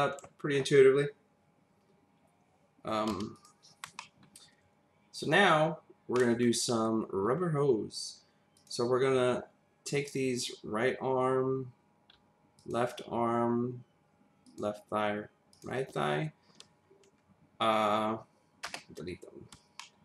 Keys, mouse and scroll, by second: 3.1 v, 3.3 click, 4.0 middle click, 6.1 middle click, 8.5 click, 12.6 ctrl+click, 14.5 ctrl+double click, 15.5 ctrl+click, 18.6 BackSpace, 19.8 middle click.